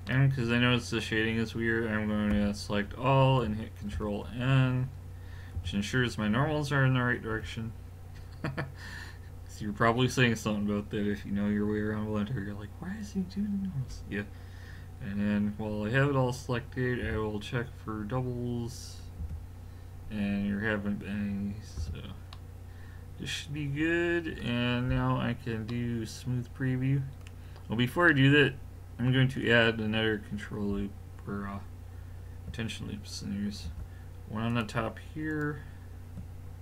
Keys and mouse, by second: 0.1 middle click, 2.3 a, 4.0 ctrl+n, 5.6 a, 7.4 l, 17.0 w, 21.8 a, 22.3 middle click, 24.2-25.7 middle drag, 27.7-28.1 middle drag, 30.0-33.7 middle drag, 33.7 ctrl+r.